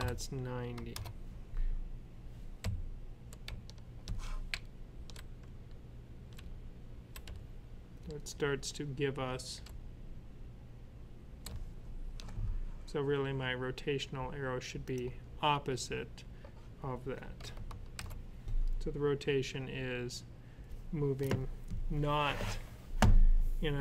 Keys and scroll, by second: 0.0-0.4 typing, 2.2-12.0 typing, 4.9 Up, 11.9 Left, 14.5 typing, 17.8 alt+F9.